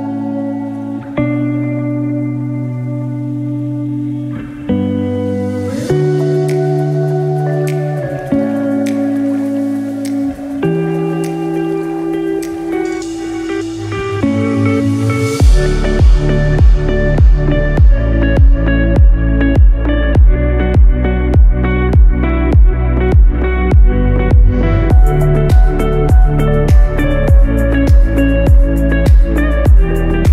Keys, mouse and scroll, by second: 0.3 click, 1.2 click, 3.0 click, 3.3 middle click, 5.1 alt+/, 5.9 ctrl+alt+/, 7.1 click, 7.6-8.1 scroll down 2, 7.9 scroll up 1, 9.0 scroll up 2, 11.7 /, 12.8 scroll down 2, 13.2 shift+middle click, 13.5 scroll up 3, 14.0 scroll down 1, 14.3 middle click, 15.6 shift+middle click, 16.1 middle click, 17.4 scroll up 1, 17.6 scroll down 3, 18.0 middle click, 18.2 click, 19.3 g, 22.2 scroll down 3, 22.5 middle click, 23.2-23.8 scroll down 4, 23.8 shift+middle click, 24.4 click, 24.7-25.3 scroll up 3, 25.3 shift+middle click, 26.3 scroll down 1, 26.6 middle click.